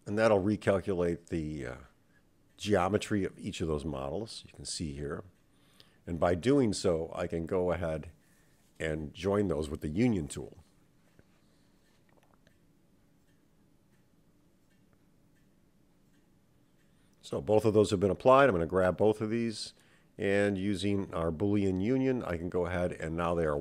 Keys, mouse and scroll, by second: 0.9-2.3 right drag, 3.3 Tab, 4.4 Tab, 6.6 click, 8.3-11.4 drag, 12.4-14.6 drag, 16.1 click, 17.2 click, 18.3 shift+click, 20.3 click, 21.1 shift+click, 21.6 shift+middle click, 23.4 /.